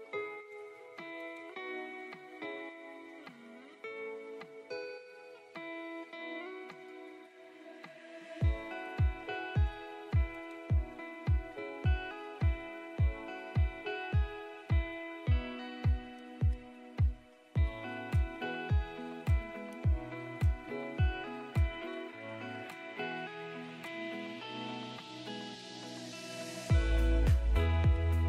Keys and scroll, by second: 1.5 Escape, 6.0 shift+F11, 14.8 ctrl+shift+a, 18.1 shift+F11, 24.0 ctrl+r, 25.2 shift+Page_Up, 26.0 Escape, 27.3 shift+Page_Up, 28.0 ctrl+shift+a.